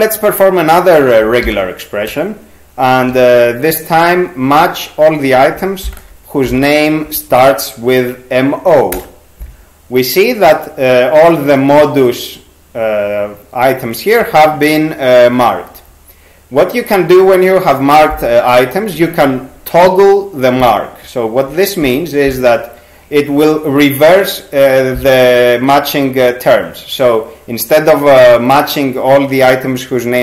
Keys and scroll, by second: 1.5 %, 3.1 m, 6.2-7.0 typing, 8.9 Return, 21.8 t.